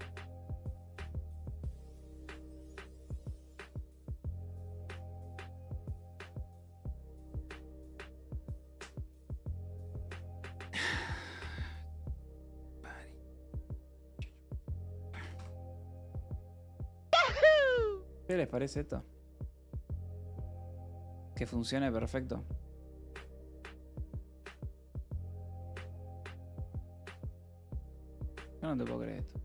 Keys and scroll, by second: 13.3-15.3 typing, 15.9 ctrl+s.